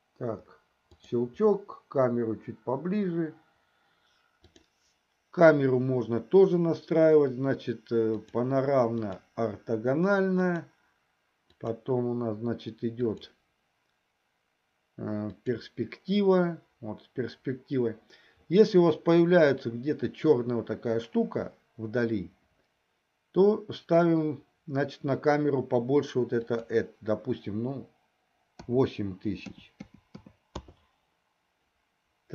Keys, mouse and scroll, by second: 4.4 click, 8.3-9.6 drag, 11.3-12.3 drag, 13.0-15.9 drag, 26.5-31.0 drag, 29.8 KP_0.